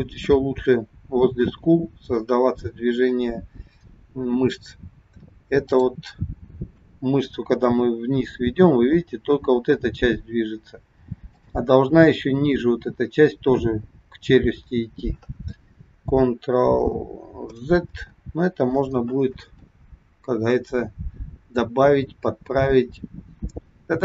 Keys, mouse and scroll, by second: 5.7 click, 7.5 g, 17.8 ctrl+z, 20.1-20.8 scroll down 2, 23.4 scroll down 2.